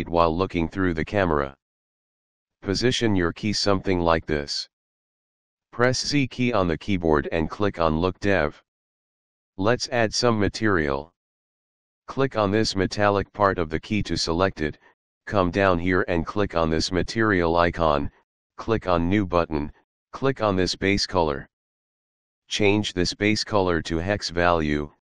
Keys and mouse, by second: 0.0 shift+middle click, 1.3 middle click, 1.5 shift+middle click, 2.1 middle click, 2.8 shift+middle click, 3.7 shift+middle click, 4.9 shift+middle click, 6.3 z, 7.8 click, 12.6 click, 17.8 click, 21.8 click, 23.5 click, 24.3 click.